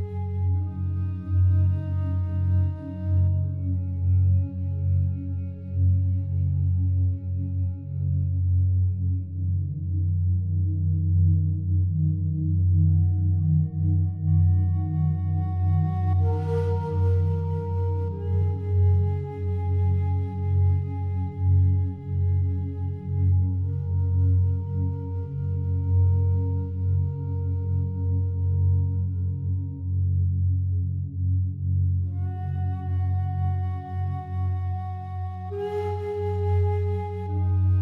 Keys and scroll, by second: 1.4 1, 1.5 5, 1.7 Return, 12.4 ctrl+7, 25.7 ctrl+7, 29.5 7, 29.7 Return, 33.5 5, 33.7 Return.